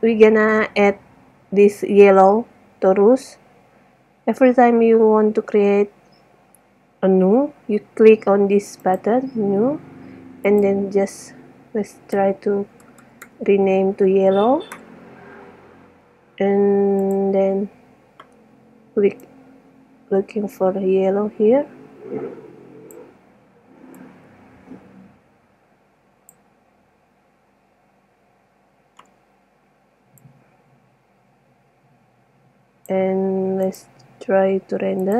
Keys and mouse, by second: 0.1 middle click, 0.9 middle click, 8.9-12.6 drag, 13.3 l, 16.2-19.0 drag, 21.2-22.3 drag, 30.4-32.4 drag, 33.9 click.